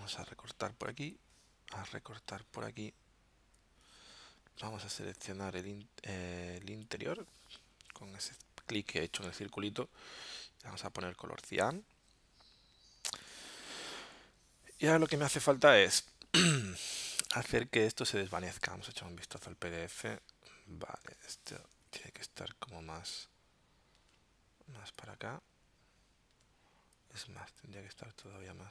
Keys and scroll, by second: 18.7 super+Tab, 21.2 super+Tab.